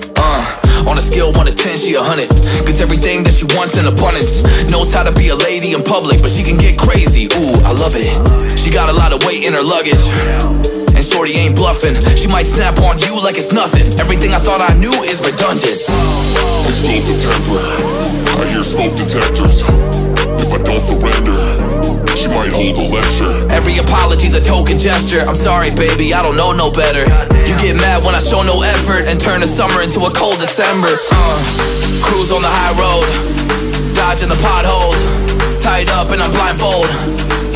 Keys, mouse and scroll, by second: 1.6 typing, 5.6 shift+click, 7.2 ctrl+g, 8.0 right click, 10.2 shift+click, 11.5 ctrl+g, 15.1-15.8 scroll up 1, 16.0 shift+click, 16.8 ctrl+g, 17.2 right click, 22.3-24.2 typing, 26.2 right click, 31.0-31.7 scroll down 1, 32.5 scroll down 1, 34.6 double click.